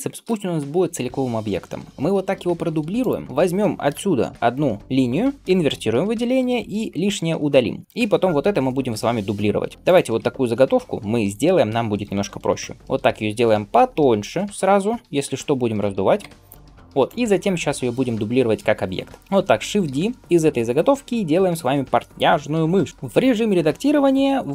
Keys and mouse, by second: 2.4 shift+d, 3.3 Tab, 4.1 ctrl+l, 5.5 ctrl+i, 6.6 x, 7.5 Tab, 8.8-24.5 shift+middle drag, 9.7 g, 10.0 Tab, 10.6-15.9 drag, 12.6 alt+s, 16.1 Tab, 16.4 click, 19.7 shift+d, 22.9-24.5 drag.